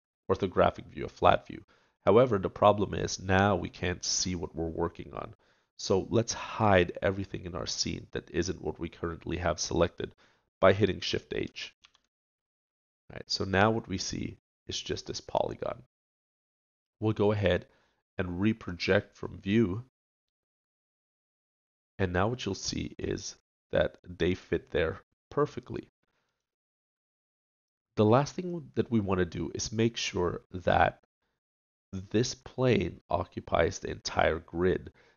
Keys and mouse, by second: 11.8 shift+h, 12.9 middle click, 18.6-20.3 drag, 20.3 middle click.